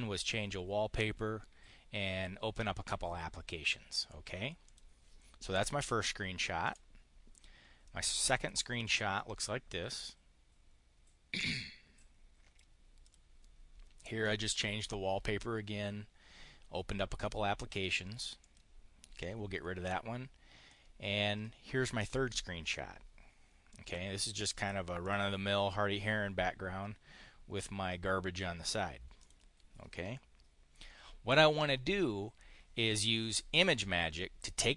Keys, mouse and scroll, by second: 4.5 click, 6.5 Delete, 7.7 click, 11.2-12.5 drag, 12.8 click, 18.3 click, 19.4 Delete, 20.5 click, 23.6 click, 24.8 click, 29.0 click.